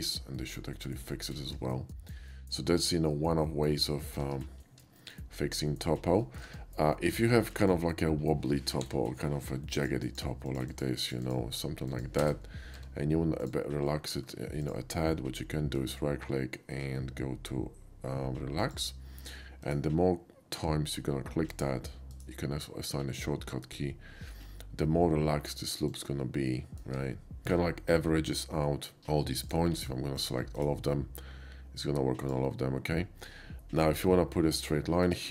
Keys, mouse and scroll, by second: 1.0 middle click, 1.7 shift+middle click, 3.1-4.2 shift+middle drag, 5.0 shift+middle click, 6.2 shift+middle click, 7.6 shift+middle click, 8.8 k, 9.8 click, 10.1 click, 10.5 click, 10.7 click, 11.1 click, 11.2 click, 11.9 click, 12.3 space, 12.4 middle click, 12.8 Tab, 12.9 space, 13.4 click, 13.7 middle click, 13.9 middle click, 14.6 ctrl+click, 15.8 ctrl+right click, 18.6 click, 19.6 right click, 21.5 click, 22.1 right click, 25.9 click, 26.5 middle click, 27.4 shift+middle click, 28.6 shift+middle click, 29.0 KP_5, 29.4 click, 30.2 ctrl+click, 30.6 ctrl+right click, 32.2 ctrl+click, 35.0 right click.